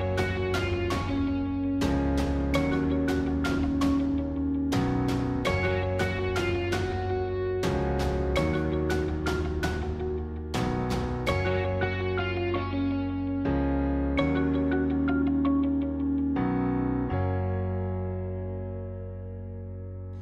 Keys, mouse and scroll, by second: 0.0 alt+shift+click, 0.8 alt+shift+click, 2.1-6.0 shift+middle drag, 6.0 ctrl+z, 6.6-8.5 middle drag, 8.5 shift+click, 9.6 shift+click, 10.0-11.8 middle drag, 11.8 shift+click, 12.0 scroll down 1, 12.2-13.8 middle drag, 14.2-15.8 shift+middle drag, 15.8 shift+click, 16.1-18.5 middle drag, 18.5 shift+click, 19.0-20.2 middle drag.